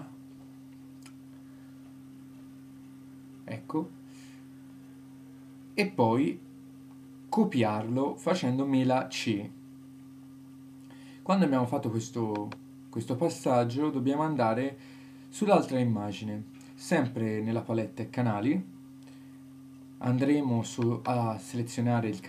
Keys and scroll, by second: 5.0 super+c.